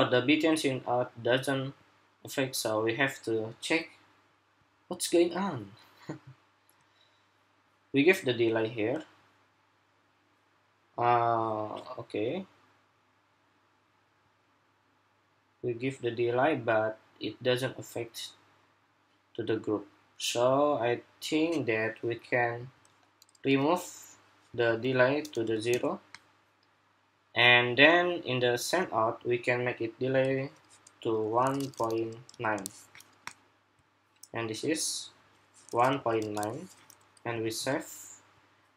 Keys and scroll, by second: 37.1 super+s.